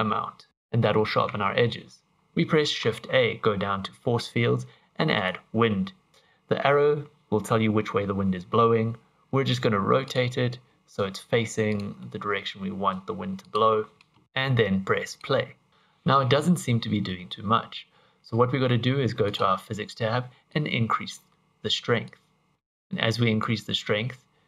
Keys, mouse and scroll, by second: 1.3 Tab, 1.9 scroll down 2, 2.1 shift+a, 5.3 shift+a, 8.7 r, 11.1 g, 12.1 middle click, 12.9 g, 15.1 click, 19.3 click, 20.5 click, 22.1 click, 22.5 click, 23.4 click.